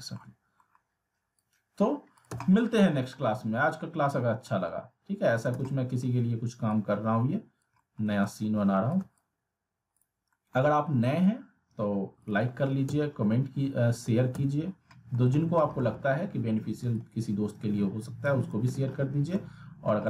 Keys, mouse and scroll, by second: 1.4-2.0 click, 2.4-3.0 alt+middle click, 3.1 scroll up 1, 4.4 middle click, 5.3 click, 5.5 z, 5.6-6.3 alt+middle click, 6.7-7.7 click, 7.8 alt+middle click, 8.9 shift+click, 10.0 click, 10.3 middle click, 10.5 e, 11.2-12.5 click, 12.4 alt+w, 12.8 z, 13.2-13.9 scroll down 1, 13.9 w, 14.7 scroll down 1, 14.9 middle click, 15.3 scroll up 1, 15.6 middle click, 16.0 scroll down 1, 17.0-18.7 drag, 18.7 alt+w, 19.4-20.0 alt+middle drag.